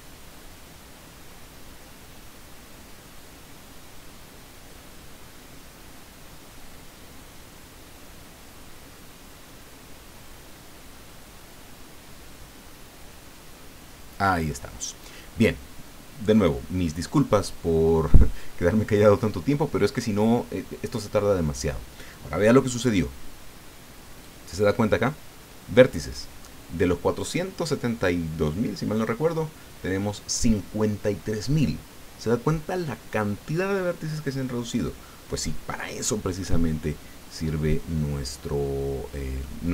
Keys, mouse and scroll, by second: 36.4-39.6 middle drag.